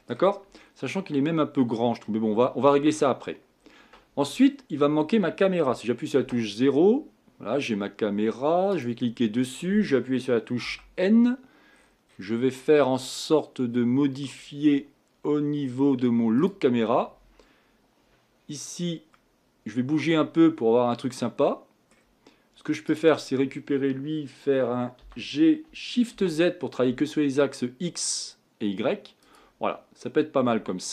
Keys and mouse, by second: 0.0 middle click, 6.2 KP_0, 8.7 click, 9.7 right click, 10.6 n, 14.1 middle click, 16.4-19.2 drag, 19.3 middle click, 19.8 middle click, 20.8 middle click, 25.0 g.